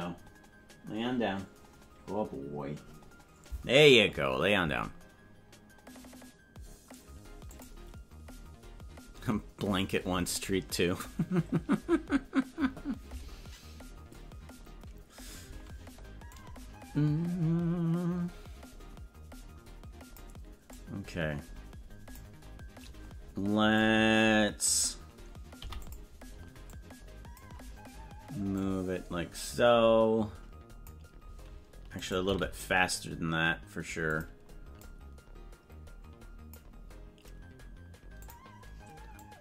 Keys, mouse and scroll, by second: 16.4-20.4 drag, 20.8-22.3 drag, 23.8 click, 25.5 i, 26.8 click, 28.5-30.9 drag, 31.9 right click, 32.2 g, 34.9-36.7 drag, 38.1 click, 39.3-39.4 drag.